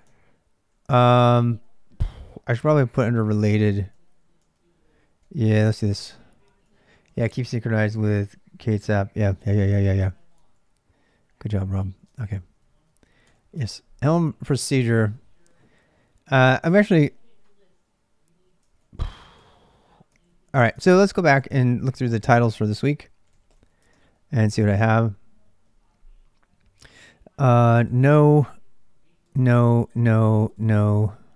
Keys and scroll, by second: 0.0-1.3 typing, 4.2-6.8 typing, 5.6 ctrl+[, 5.6 ctrl+j, 9.7-13.0 typing, 13.3 Return, 16.6 z, 18.5 ctrl+[, 18.6-31.3 typing, 20.6 ctrl+c.